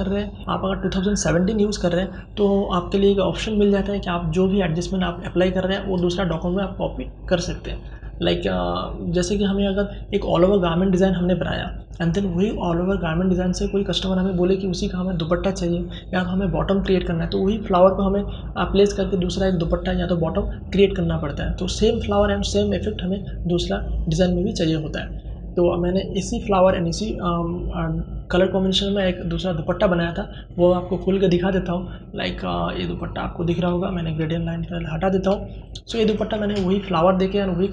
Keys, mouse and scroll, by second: 4.1 shift+click, 29.9-33.5 drag, 33.5 ctrl+h, 34.3 ctrl+space, 34.5 ctrl+click, 34.8 ctrl+space.